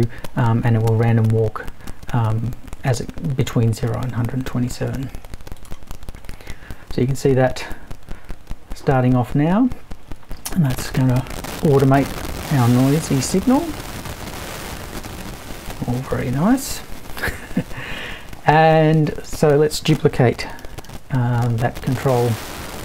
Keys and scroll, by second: 20.6 super+c, 20.8 super+v.